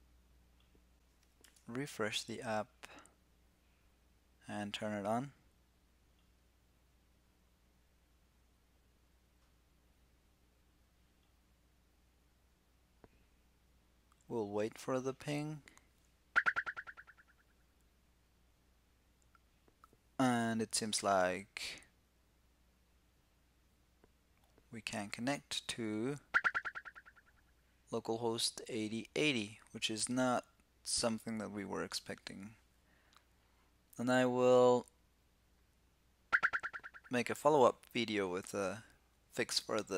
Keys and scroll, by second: 1.1 super+r.